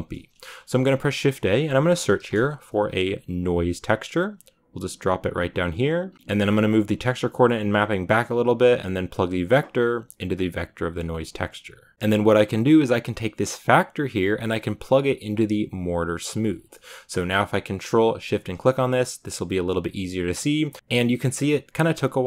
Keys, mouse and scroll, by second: 6.1 middle click, 6.3-11.9 drag, 11.9-13.4 scroll up 9, 13.4-13.8 scroll up 1, 18.1 ctrl+shift+click.